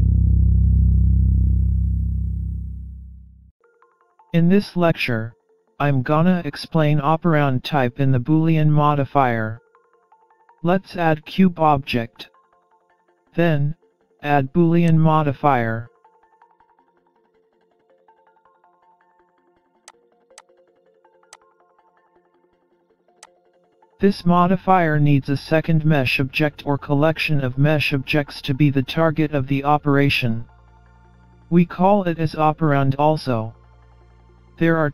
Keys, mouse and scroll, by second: 16.4 shift+a, 18.8-19.3 scroll down 4, 19.3-21.3 scroll up 10, 21.3 middle click, 21.3-22.4 scroll up 1, 23.2 click, 23.7 click, 25.1 click, 27.6 scroll up 2, 28.2 middle click.